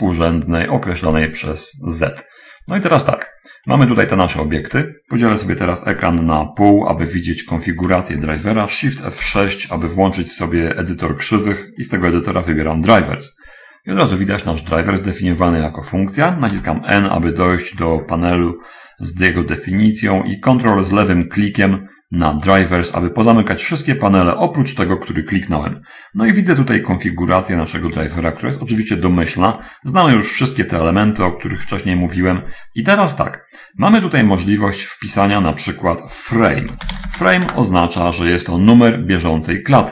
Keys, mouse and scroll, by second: 3.7 click, 4.3 ctrl+click, 4.5 ctrl+middle click, 6.1 click, 7.1-8.1 drag, 9.7 shift+F6, 11.9 click, 13.1 click, 15.8 click, 16.7 n, 18.6 middle click, 19.4-20.7 middle drag, 22.3 ctrl+click, 26.2 middle click, 27.6 click, 28.5-30.0 ctrl+middle drag, 30.0-30.7 ctrl+scroll up 3, 31.9-32.3 scroll down 2, 32.5 scroll down 2, 37.1 f, 37.3 r, 37.5 Return, 37.5 m, 37.5 e.